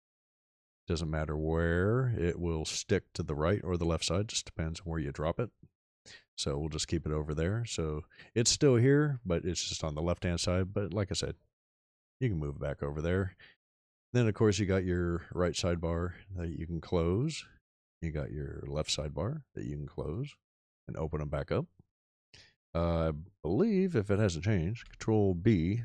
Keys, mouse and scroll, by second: 24.7 ctrl+b.